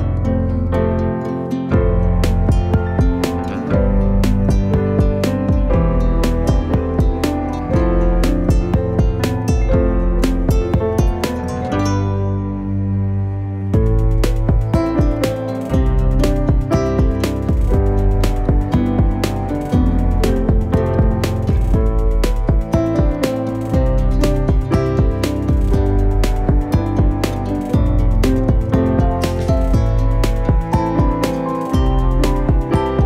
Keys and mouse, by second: 0.6 s, 2.3 g, 3.3 r, 4.4 s, 5.3 shift+middle click, 6.0 r, 7.6 s, 8.6 g, 9.2 s, 11.0 shift+middle click, 11.6 s, 13.2 g, 14.9 s, 16.6 g, 17.4 w, 18.8 w, 20.4 middle click, 21.2 ctrl+r, 22.0 g, 23.9 shift+middle click, 24.3 w, 25.6 s, 26.3 g, 27.2 ctrl+r, 28.2 shift+middle click, 28.6 g, 29.5 s, 30.3 shift+middle click, 31.0 shift+middle click, 31.6 ctrl+r, 32.7 s.